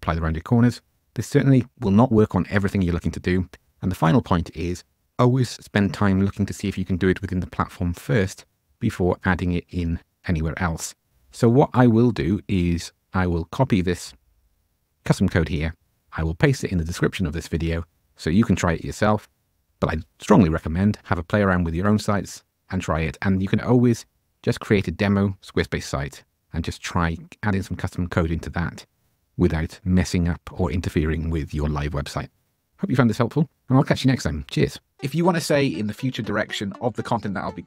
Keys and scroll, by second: 12.3 super+m.